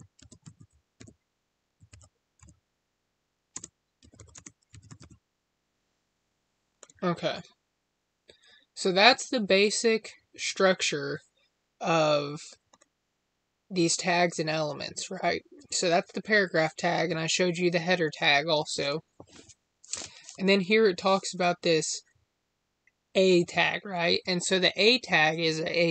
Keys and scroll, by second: 3.4 space, 4.2 space.